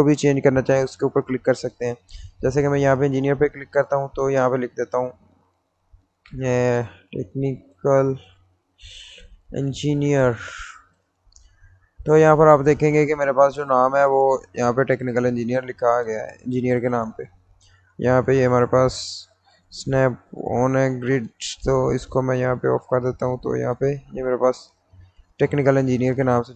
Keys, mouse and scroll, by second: 2.1 click, 6.4-11.0 typing, 12.3 click, 19.8 click, 23.7 click, 23.7 click.